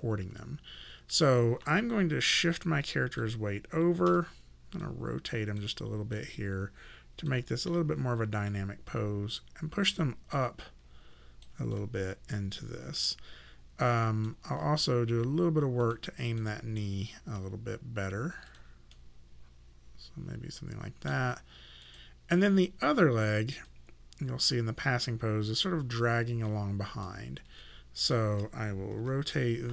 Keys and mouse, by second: 1.8 click, 4.1 e, 4.9 click, 7.7 w, 8.5 click, 11.7 alt+click, 15.9 click, 18.5 click, 18.9 middle click, 21.9 click, 26.5 click, 27.6 click, 29.0 e.